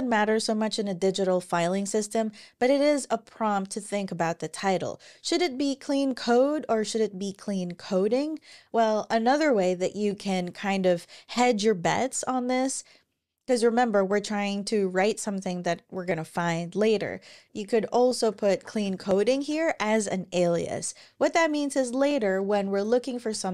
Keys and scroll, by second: 17.8-19.6 typing, 22.1 Return, 22.3 Return, 22.5-23.5 typing.